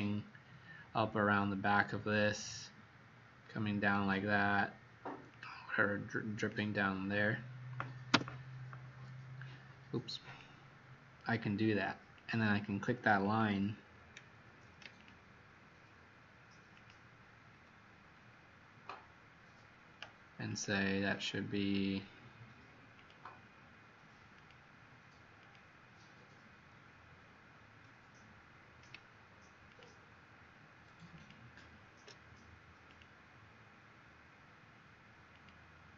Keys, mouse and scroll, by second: 8.1 Return, 10.2 click, 16.7 ctrl+click, 20.4 click, 29.6 ctrl+click, 31.1 ctrl+click, 32.8 click.